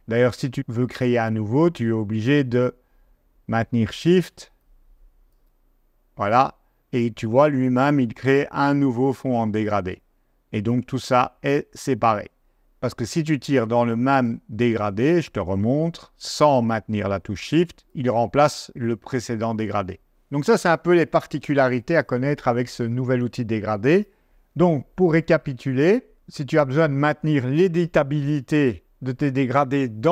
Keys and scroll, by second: 19.6 super+z.